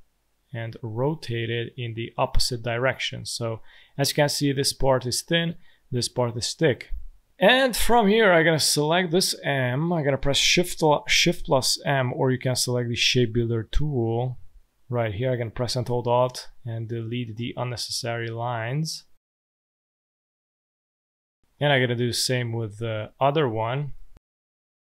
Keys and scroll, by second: 3.2 space, 6.7 space, 9.3 space, 11.1 shift+m, 17.2 space, 21.4 space, 22.8 v.